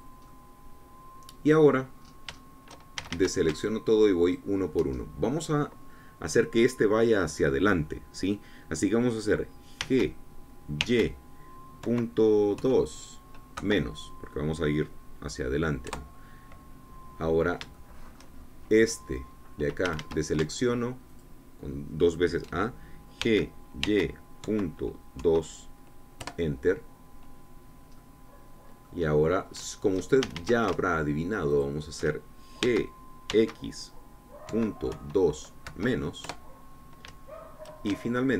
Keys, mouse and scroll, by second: 0.9 click, 1.3-3.0 middle drag, 3.0-3.3 scroll up 1, 3.4 shift+middle click, 4.0 shift+a, 5.2 alt+shift+click, 6.0-10.8 alt+shift+drag, 10.8 g, 11.8 y, 12.8 KP_Decimal, 13.6 KP_2, 14.6 KP_Subtract, 16.9 KP_Enter, 18.8 shift+click, 20.9 a, 22.3 alt+shift+click, 24.3 g, 24.9 y, 25.5 KP_Decimal, 26.2 KP_2, 27.2 KP_Enter, 29.0-31.3 drag, 31.3 shift+a, 32.7 alt+shift+click, 33.7 g, 34.3 x, 35.5 KP_Decimal, 36.0 KP_2, 36.7 KP_Subtract, 37.3 KP_Enter.